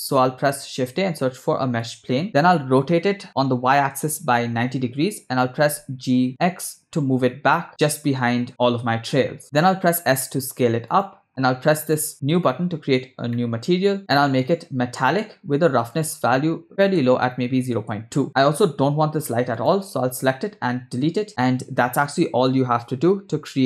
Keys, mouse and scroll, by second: 0.7 shift+a, 3.1 r, 5.7 g, 9.8 s, 11.8 click, 13.3 middle click, 14.1-15.1 drag, 15.9-17.9 drag, 19.6 click, 21.1 Delete, 21.6 space.